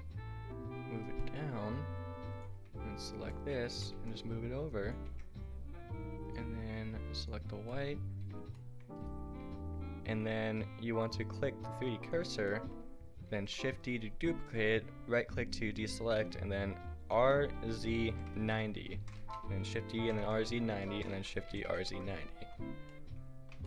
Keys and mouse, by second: 1.3-2.9 drag, 3.0-5.1 drag, 3.7 g, 5.1 Tab, 7.1-7.7 drag, 8.0-9.9 drag, 8.4 a, 13.3 shift+d, 17.1 r, 19.0 shift+d, 20.9 shift+d, 22.3 a, 23.0 drag.